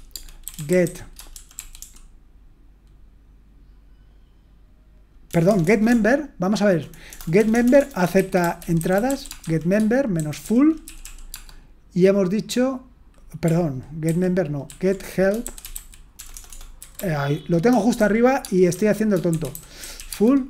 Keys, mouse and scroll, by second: 0.0-2.3 typing, 5.3-11.5 typing, 14.0 ctrl+w, 14.7 ctrl+w, 15.2-20.4 typing.